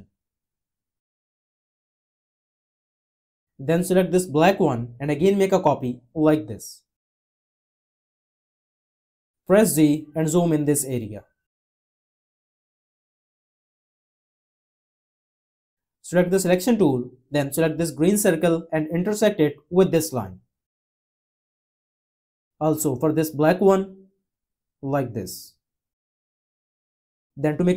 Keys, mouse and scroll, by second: 5.4-7.4 alt+drag, 9.9 z, 11.5 z.